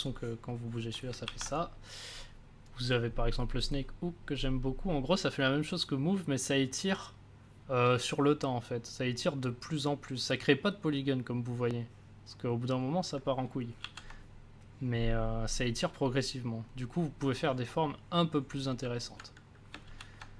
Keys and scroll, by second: 1.2 ctrl+z, 13.8 ctrl+z, 19.8 ctrl+z.